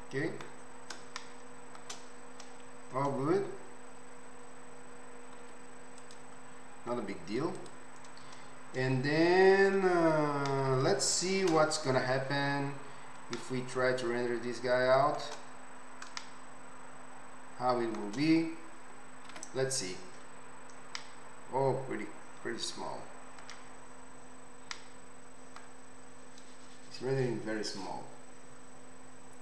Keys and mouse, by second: 0.1 middle click, 0.3 right click, 0.5 middle click, 0.6 right click, 0.6-2.4 middle drag, 2.4-5.4 right drag, 5.4-21.5 middle drag, 5.4 z, 7.6 click, 7.6 right click, 11.5 KP_0, 21.5-29.4 right drag.